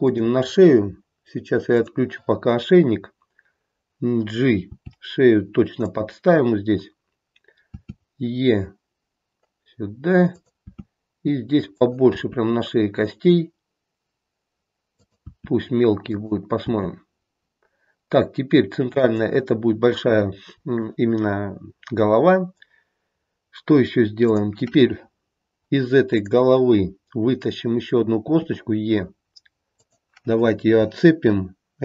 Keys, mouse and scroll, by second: 1.7 click, 4.7 g, 10.6 e, 15.3 e, 16.6 e, 24.1 click, 26.1 click, 28.2 e.